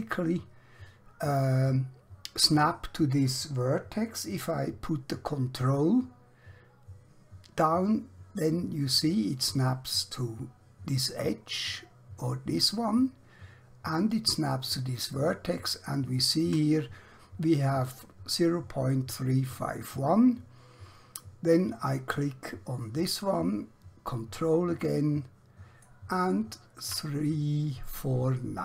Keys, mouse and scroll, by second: 21.8 click.